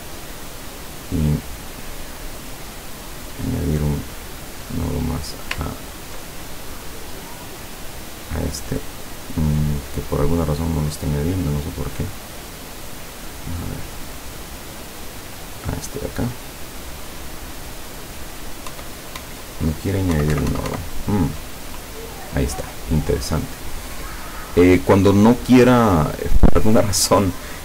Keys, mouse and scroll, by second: 2.0 click, 3.0 click, 3.9 click, 4.7 click, 5.1 click, 5.8 ctrl+scroll up 1, 6.5 ctrl+click, 7.2 click, 7.9-9.1 drag, 12.6 click, 12.9 click, 14.1 click, 15.5 click, 16.5 click, 17.1 click, 18.7 Insert, 20.2 Insert, 21.7 click, 24.7 click.